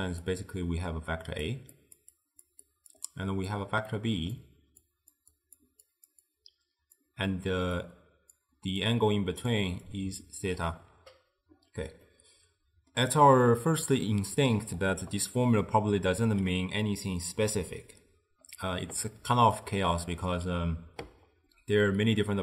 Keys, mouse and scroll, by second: 0.0-10.6 typing, 0.7-1.5 drag, 1.9 click, 2.2 click, 2.7 click, 3.6 click, 4.9 click, 5.4 click, 6.0 click, 6.4 click, 7.9 click, 8.9 click, 10.0 click, 12.1-15.2 middle drag, 19.3 d, 19.7-20.3 drag, 20.3-20.6 d.